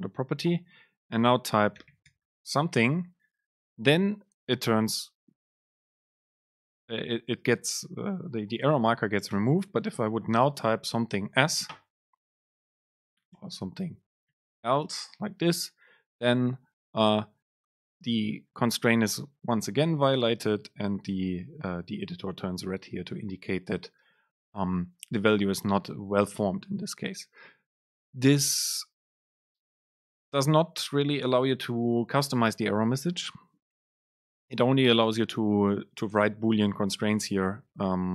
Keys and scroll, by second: 13.5 BackSpace, 23.0 BackSpace.